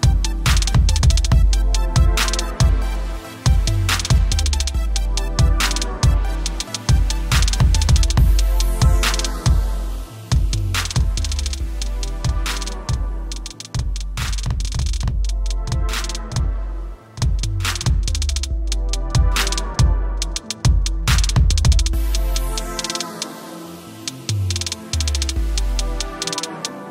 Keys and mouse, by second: 0.9 click, 6.1 v, 6.6 click, 7.5 click, 8.4 click, 8.7 ctrl+t, 9.1 click, 9.5 alt+shift+click, 10.0 click, 11.4 Return, 12.7 click, 12.9 b, 15.6 typing, 18.4 typing, 24.6 v, 25.1 click, 25.7 ctrl+alt+click, 26.8 t.